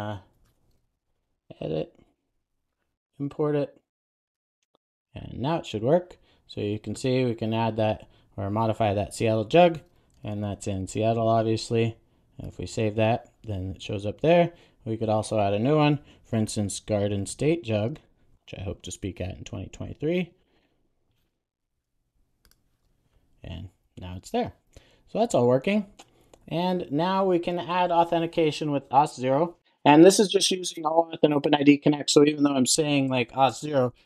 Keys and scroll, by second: 2.3 alt+Return, 4.0 super+s.